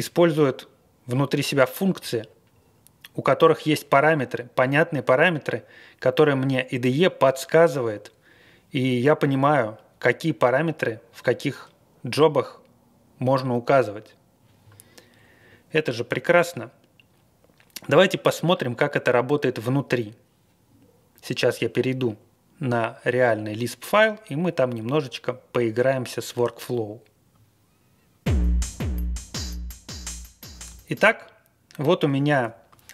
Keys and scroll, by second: 31.0 super+=.